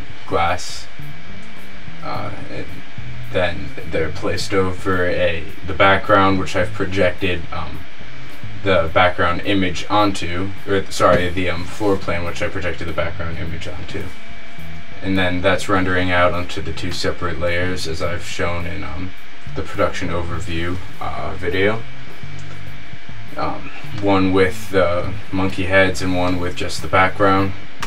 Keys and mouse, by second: 17.1-17.7 middle drag, 18.4 z, 18.6 z, 18.9-21.8 middle drag, 25.8-26.5 middle drag.